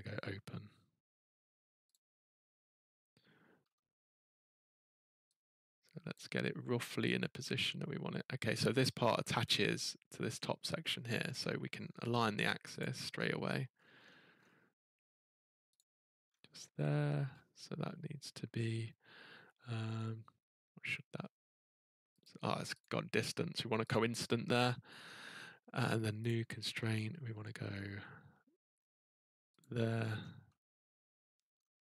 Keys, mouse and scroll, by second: 1.9 click, 2.8-3.6 scroll, 6.1 click, 8.6 click, 8.9-10.3 scroll, 11.7 scroll, 12.8 click, 13.1-14.4 scroll, 15.7 click, 16.2-17.5 scroll, 22.2 click, 22.8 click, 23.9 click, 24.5-25.1 scroll, 26.2 click, 27.3-27.6 scroll, 27.6 middle click, 27.7 middle click, 29.0-29.6 scroll, 29.6 click, 29.9 scroll, 30.0 middle click, 30.0 middle click, 31.3 middle click, 31.5 scroll, 31.5 middle click, 31.6 middle click.